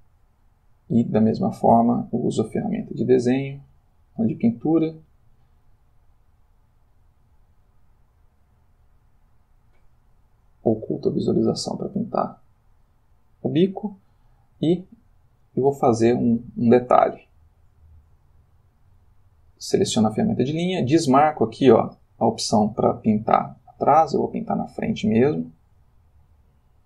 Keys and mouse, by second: 2.5 click, 3.7 click, 5.0 click, 9.6 click, 10.5 click, 11.4 click, 13.0 click, 13.4 click, 16.2 click, 17.9 click, 18.5 click, 22.0 click, 24.2-26.8 drag.